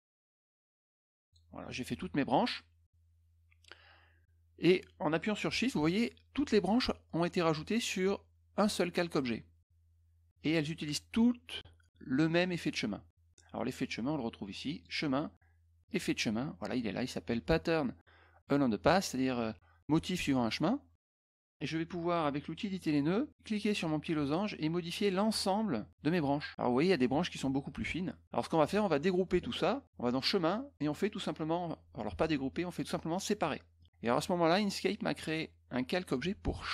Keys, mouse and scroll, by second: 0.2 shift+click, 1.2 shift+click, 14.7 click, 15.8 click, 21.1 click, 22.7 click, 24.3-26.5 drag, 30.0 click, 33.7 click.